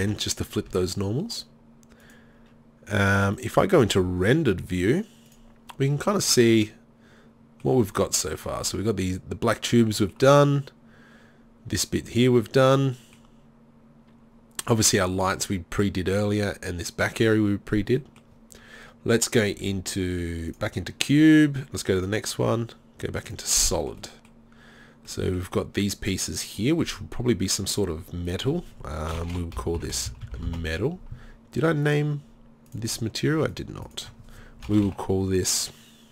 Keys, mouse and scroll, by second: 0.7 Tab, 13.1-15.4 middle drag, 20.5-22.2 drag, 22.7 click, 27.5 middle click, 27.8-32.8 drag.